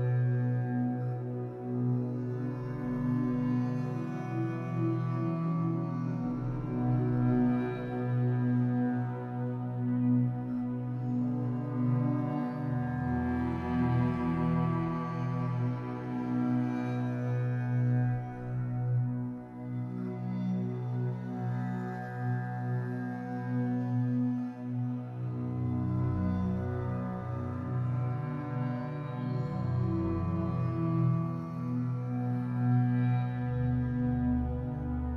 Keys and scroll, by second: 2.5 Escape, 4.4 Escape, 6.7 Escape, 12.1 Escape, 14.9 Escape, 16.5 Escape.